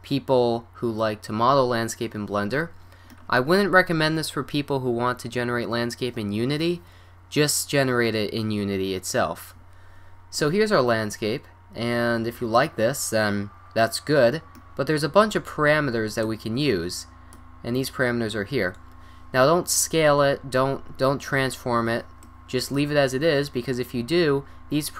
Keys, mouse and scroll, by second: 11.6 middle drag, 12.9-15.6 middle drag, 16.3-17.6 drag, 17.8 click, 17.8 middle drag, 18.0 click, 18.2 drag, 18.7 middle click, 20.5 middle drag, 24.2 middle click.